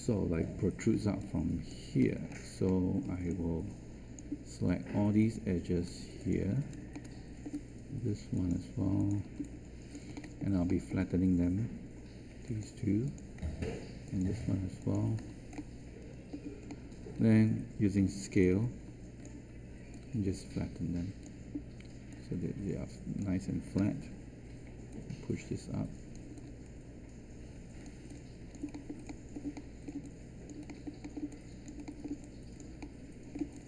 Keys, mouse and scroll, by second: 18.0 r, 23.7 w.